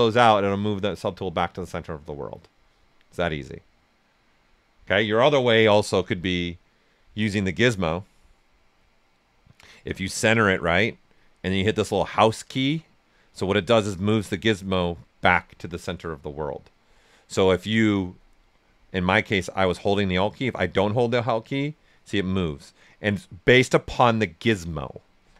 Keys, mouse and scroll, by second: 0.2 typing, 5.9 typing, 6.7 right click, 7.7-8.4 typing, 10.5 click, 13.7 alt+click, 13.7 typing, 18.0 alt+click, 24.9 click, 25.2 ctrl+z.